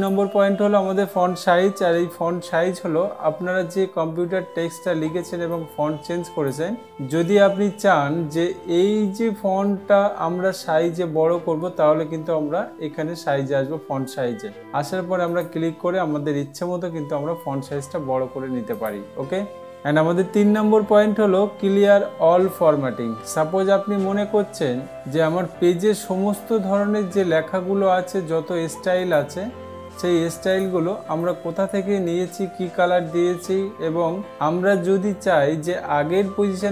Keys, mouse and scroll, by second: 0.5-1.5 drag, 6.1 click, 15.9 click, 19.3 click, 29.6 click, 31.1-32.8 drag.